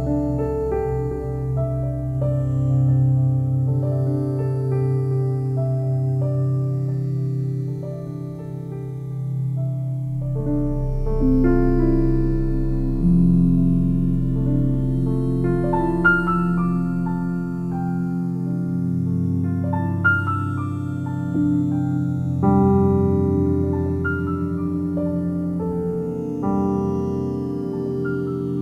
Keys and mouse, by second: 0.4 click, 1.2 click, 2.5 click, 2.8 click, 3.1 click, 4.0 click, 5.6 click, 6.8 click, 7.3 alt+click, 9.4 click, 10.3 click, 11.5-14.4 alt+drag, 14.9 1, 15.5 ctrl+alt+click, 15.9 click, 17.4 click, 18.3 1, 19.3 click, 19.9 click, 20.3-22.8 alt+drag, 20.3 typing, 22.6 typing, 23.8 typing, 24.7 click, 26.7-27.1 typing, 28.3 click.